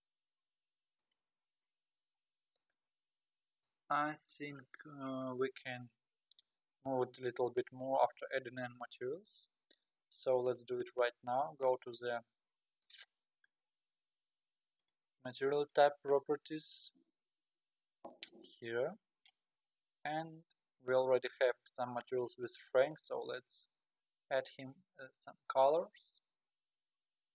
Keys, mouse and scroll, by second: 2.2 scroll up 2, 2.7 scroll down 1, 3.2-4.2 scroll down 1, 10.9-11.8 middle drag, 11.8-12.7 scroll down 4, 12.7 scroll down 1, 14.8 click, 15.6 click, 18.5 click, 22.5 click, 23.4 click.